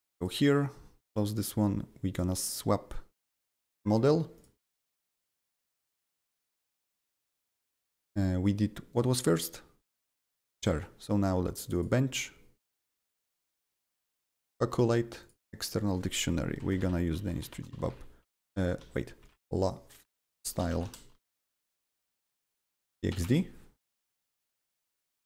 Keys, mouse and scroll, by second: 0.1 click, 1.0-2.1 drag, 2.1 click, 3.3 click, 3.8 click, 4.3 click, 5.4 click, 7.3 click, 7.4 double click, 8.9-11.6 drag, 11.6-13.1 drag, 13.1 click, 13.8 click, 15.2 click, 15.6 click, 16.2-21.5 typing, 17.4 click, 24.8 click.